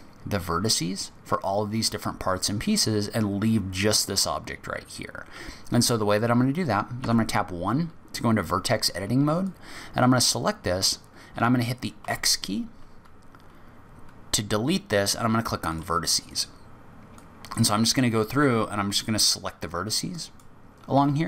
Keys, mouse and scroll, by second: 7.0 1, 9.4 click, 12.0 x, 17.1 click, 18.3 x, 20.1 click, 20.9 x.